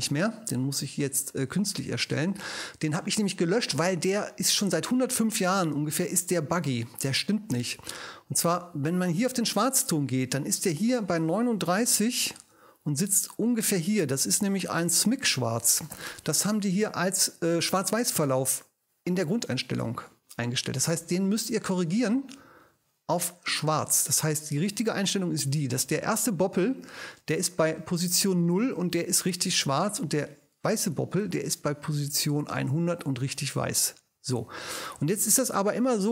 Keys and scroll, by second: 11.6 3, 11.9 9.